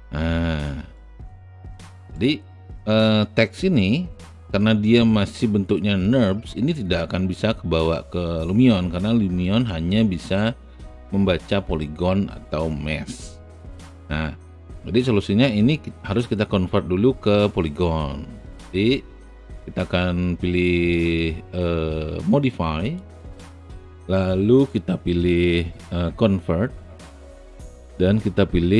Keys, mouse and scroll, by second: 0.9 alt+right click, 1.6 alt+middle click, 2.1 alt+right click, 4.7 alt+click, 5.3-6.7 alt+middle drag.